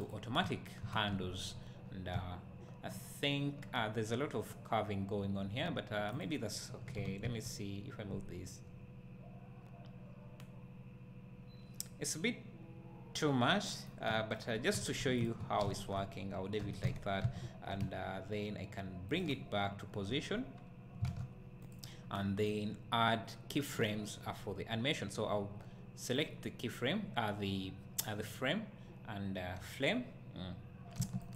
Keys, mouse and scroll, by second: 0.1 v, 0.8 Tab, 1.1 `, 6.2 click, 6.9 g, 14.1 `, 15.2 shift+click, 15.6 `, 16.6 g, 19.1 click, 19.3 `, 20.2 scroll up 1, 20.7 scroll down 1, 21.0 alt+a, 21.7 click, 22.5-31.0 right drag, 31.0 g.